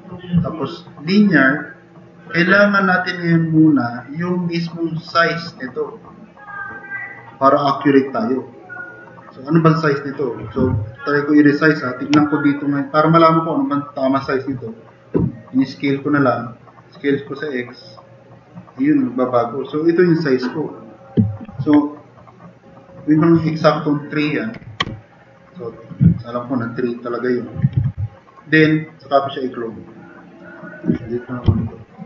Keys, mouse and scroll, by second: 10.6 t, 21.5 ctrl+z, 22.6 click, 24.5 3, 24.8 Return, 26.2 drag, 27.0 drag, 27.8 e, 28.2 click, 31.4 Delete.